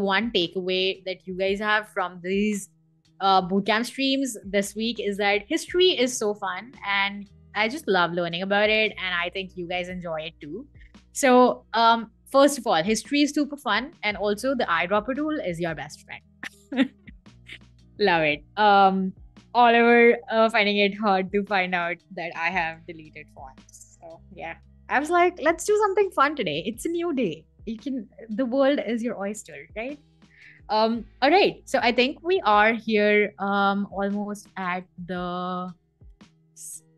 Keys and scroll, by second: 22.3-24.0 typing, 24.5 Escape, 29.7 super+a, 30.0-31.3 typing.